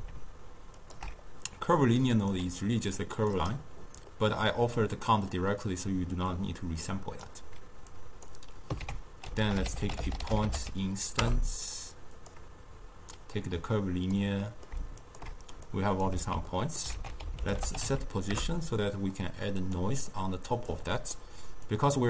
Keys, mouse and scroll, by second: 0.8 alt+shift+click, 2.2 click, 3.3 click, 4.2-6.4 middle drag, 6.4-8.9 drag, 8.9 ctrl+a, 13.2 click, 14.5-15.1 middle drag, 15.1 alt+shift+click, 15.8-16.3 drag, 16.3 ctrl+x, 16.6 middle click, 17.0 ctrl+a, 20.2 click, 21.0-21.8 middle drag, 21.8 click.